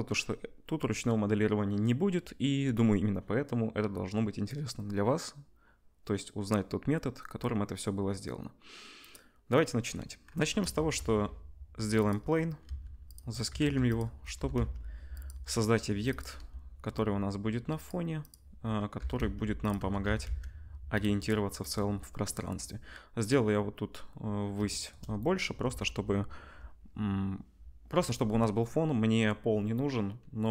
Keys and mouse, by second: 10.8 shift+a, 12.6 s, 13.1-14.3 middle drag, 13.4 Tab, 13.7 2, 14.3 e, 15.6 click, 16.3 ctrl+b, 18.9 g, 19.7 Tab, 20.0 s, 21.3-30.5 drag.